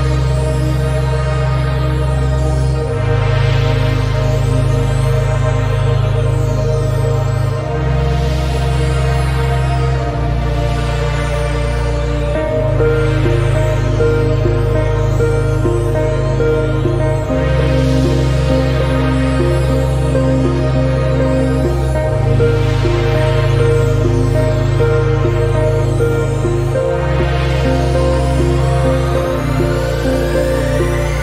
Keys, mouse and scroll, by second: 0.5 s, 3.5 Tab, 4.2-6.5 right drag, 7.4-9.7 drag, 10.1 Tab, 11.0 alt+s, 14.8 Tab, 15.5 s, 16.9 click, 17.9 scroll up 2, 18.6 click, 19.9 scroll up 1, 20.9 scroll up 1, 21.0 click, 22.8 click, 23.1-24.1 scroll down 10, 24.1-25.3 scroll down 1, 25.3-26.0 shift+middle drag, 26.0-26.5 scroll up 7, 26.5-28.1 middle drag, 28.1 KP_1, 29.2-29.7 shift+middle drag, 29.7-30.1 scroll up 5, 30.2 click.